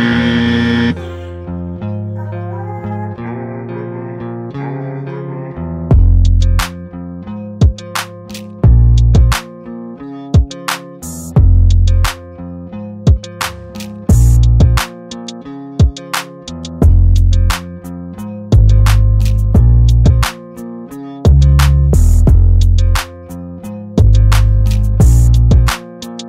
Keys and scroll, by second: 7.1 ctrl+t, 9.7 Return, 17.8 ctrl+t.